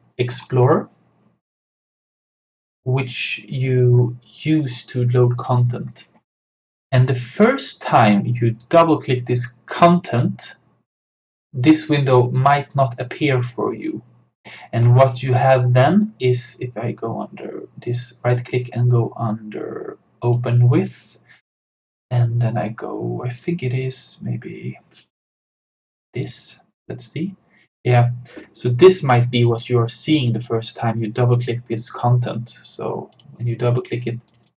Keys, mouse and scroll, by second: 1.7-3.9 drag, 10.0-14.8 drag, 15.8 right click, 20.3-25.8 drag, 26.0 click, 29.3-31.8 drag.